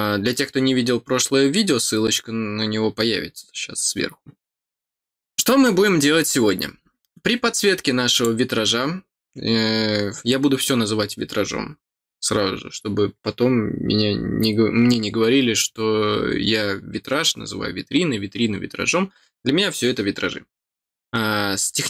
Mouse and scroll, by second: 8.1 click.